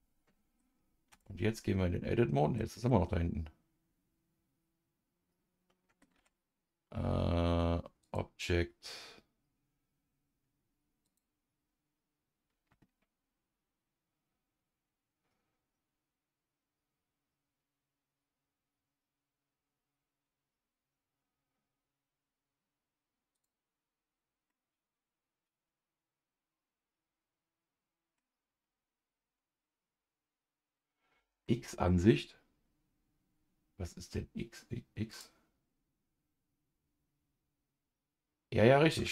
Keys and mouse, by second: 1.1 Tab, 1.5-2.6 middle drag, 2.9-6.0 middle drag, 6.1 Tab, 8.0-23.4 drag, 24.5-28.2 middle drag, 31.4 middle click, 35.1 click, 38.8 Tab.